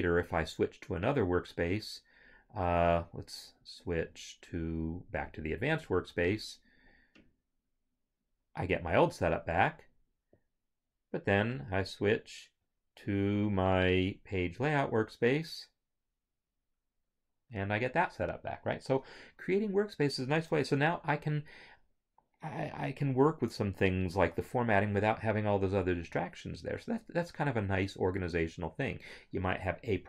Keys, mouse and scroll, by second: 1.3 scroll, 1.5 click, 14.6 click, 20.5 Home.